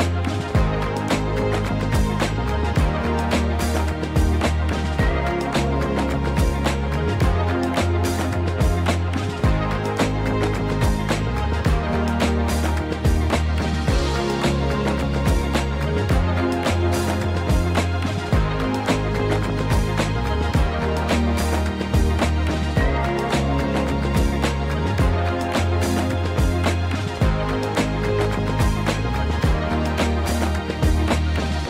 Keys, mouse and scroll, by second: 0.3 click, 1.2-2.5 drag, 4.2-7.0 middle drag, 7.6-7.9 middle drag, 8.2 click, 9.8 click, 10.8-11.7 scroll up 2, 11.7-12.6 drag, 16.0-17.7 drag, 17.4 KP_0, 19.3-22.8 drag, 22.4 KP_0, 23.7-26.4 scroll down 8, 26.4 click, 26.8-27.8 scroll down 3, 28.8-29.4 scroll down 1, 30.8-31.6 drag.